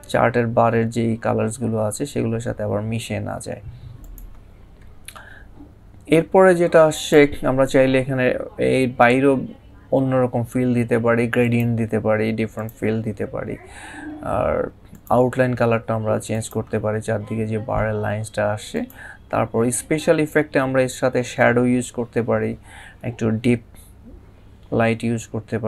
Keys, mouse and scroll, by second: 3.8 click, 6.7 click, 11.2 click, 14.7 click, 18.5 click.